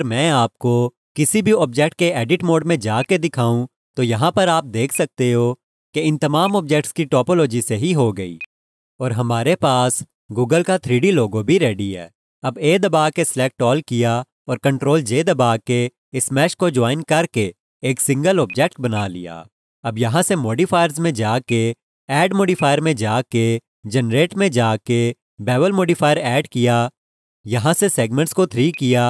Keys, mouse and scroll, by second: 1.6 Tab, 3.0 click, 4.2 Tab, 4.9 click, 6.4 click, 7.0 Tab, 8.4 click, 10.5 click, 10.5 alt+click, 15.2 ctrl+j, 18.5 click, 18.9 double click, 23.5 click, 26.3 click, 28.9 double click.